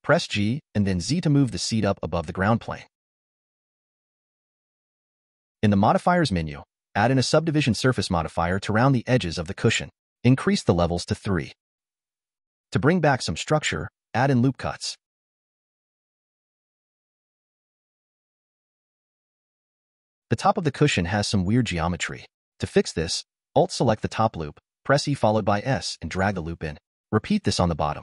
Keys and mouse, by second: 0.5 g, 3.0-4.0 drag, 5.4 click, 6.3-8.8 drag, 10.2 click, 10.9 click, 11.9 middle click, 16.3-17.5 drag, 18.2 click, 19.5-20.6 middle drag, 22.6 alt+click, 24.3 e, 27.5 e.